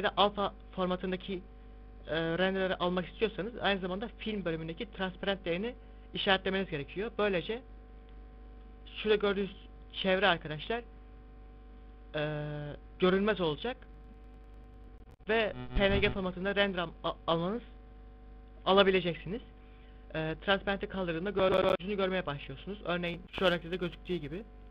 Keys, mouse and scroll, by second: 5.0 click, 6.4 click, 6.9 click, 9.6 middle click, 20.6 click, 22.5 click, 24.0 click.